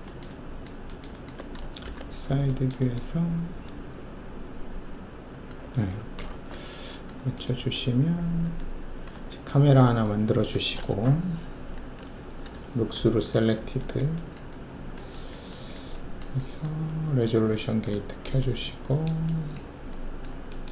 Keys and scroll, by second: 1.8 alt+shift+4, 6.3 alt+shift+q, 12.9 alt+shift+z.